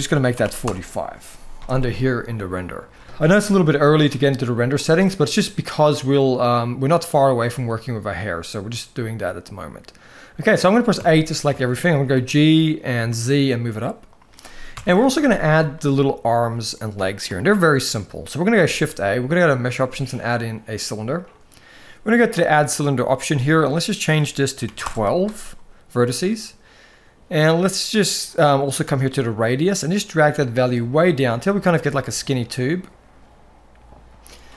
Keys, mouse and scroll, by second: 7.4-7.9 shift+middle drag, 8.9-10.4 middle drag, 10.7 a, 11.3 shift+middle drag, 11.9 g, 14.5 KP_1, 14.8 alt+a, 15.5 shift+middle click, 17.1 shift+middle drag, 18.4 shift+a, 23.1-24.6 drag, 28.9-34.5 shift+drag.